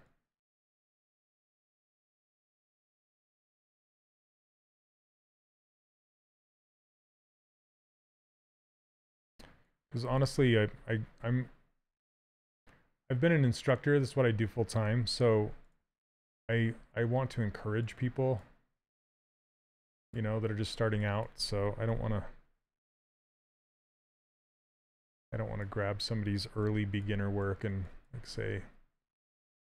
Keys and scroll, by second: 21.6 q, 22.8 s, 26.3 s, 29.6 shift+f.